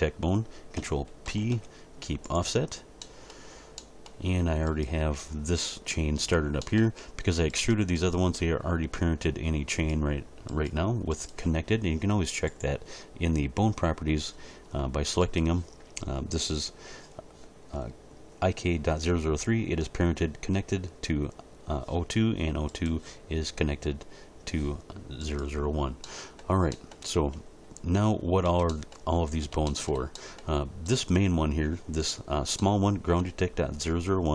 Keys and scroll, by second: 1.3 ctrl+p, 28.4 Tab.